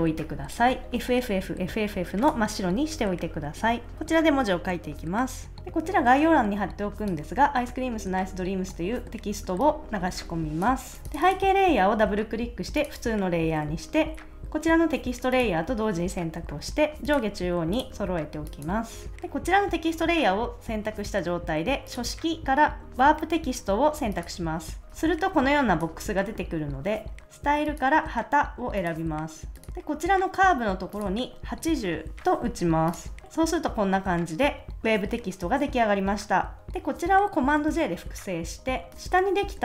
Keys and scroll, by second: 31.5-32.3 typing, 37.6 super+j.